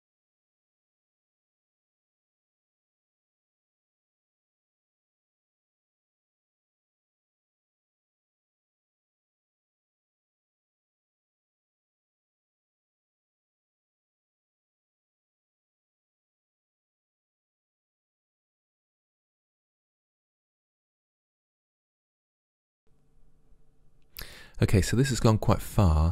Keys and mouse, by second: 1.1 Delete, 1.3 middle click, 2.2 click, 2.8 Delete, 3.1 click, 3.5 Delete, 4.2 middle click, 4.6 right click, 4.9 Delete, 5.2 right click, 5.4 Delete, 13.6 middle click, 14.2 right click, 14.4 Delete, 14.4 click, 14.7 middle click, 15.6 middle click, 15.8 click, 16.0 Delete, 16.2 middle click, 16.6 click, 16.9 Delete, 17.6 Delete, 18.3 middle click, 19.0 right click, 19.4 Delete, 19.8 click, 20.4 click, 20.7 Delete, 21.3 click, 21.6 Delete, 23.1-26.1 drag.